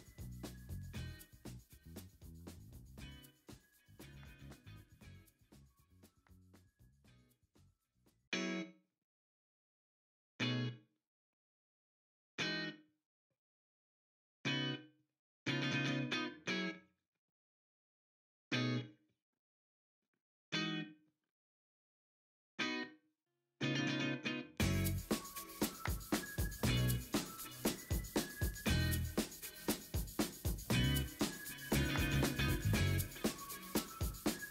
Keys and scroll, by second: 0.6 e, 1.0 0, 2.6 ctrl+z, 3.9 ctrl+z, 4.1 ctrl+z, 4.9 l, 5.9 s, 6.7 0, 7.1 s, 7.2 Escape, 7.3 s, 8.6 0, 9.2 ctrl+d, 11.3 ctrl+a, 11.4 v, 12.3 ctrl+t, 13.8 ctrl+d, 17.0 ctrl+t, 19.1 v, 20.0 ctrl+t, 20.6 v, 21.2 e, 22.6 w, 23.0 ctrl+d, 26.4 b, 27.0 b, 28.1-28.7 typing, 30.0 b, 30.0 0, 32.6-34.5 typing, 33.2 ctrl+z.